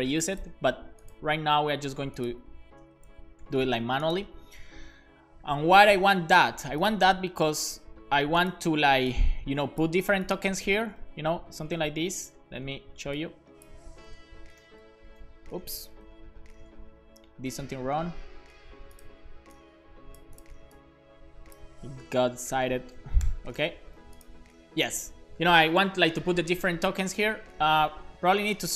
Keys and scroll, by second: 2.8 Return, 3.1 super+v, 3.4 super+s, 10.8 Return, 11.0 super+v, 11.6 Return, 11.8 super+v, 14.1 BackSpace, 14.6 alt+shift+f, 15.0 super+s, 17.7 super+z, 22.0 BackSpace, 23.2 alt+shift+f, 23.6 super+s.